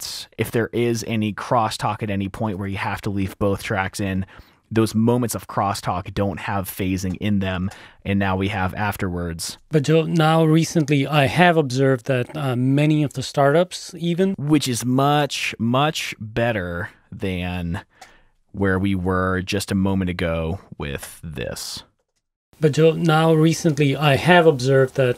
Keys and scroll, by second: 0.1 F2, 2.7 super+`, 4.3 super+`, 4.3 F7, 7.1 r, 7.9 F7, 8.1 t, 10.0 e, 13.2 F7, 14.5 super+2, 14.5 space, 18.3 super+z, 18.9 super+2, 18.9 F2, 21.7 t, 22.3 F7, 24.6 space.